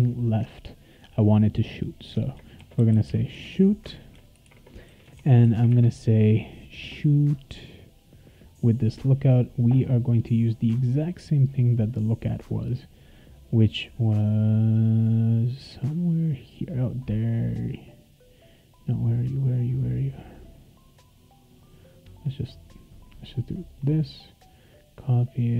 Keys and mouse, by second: 2.3-5.4 typing, 11.7 click, 12.0 click, 13.4 click, 23.5 click, 23.7 click.